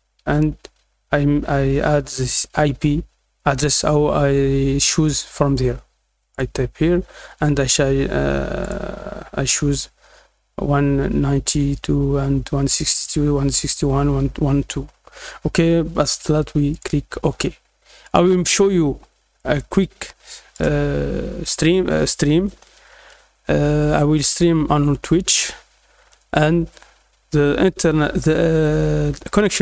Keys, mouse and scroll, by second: 6.3 click, 8.6 click, 16.7 click, 18.0-20.5 drag.